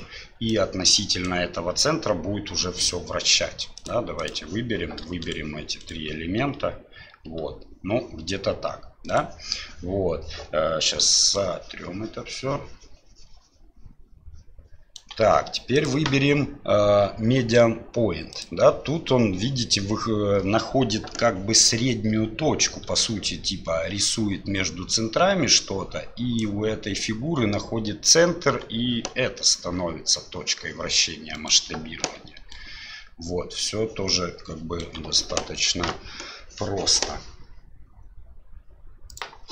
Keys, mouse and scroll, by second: 0.5 click, 2.2 d, 3.9 click, 5.2 shift+right click, 5.8 shift+right click, 7.1 r, 11.0 d, 11.3-15.0 right drag, 15.0 d, 15.1 d, 15.9-18.4 drag, 22.9 d, 23.4 d, 23.4-28.5 d, 23.5-26.4 drag, 29.2 r, 32.1-34.9 d, 32.5-34.9 right drag.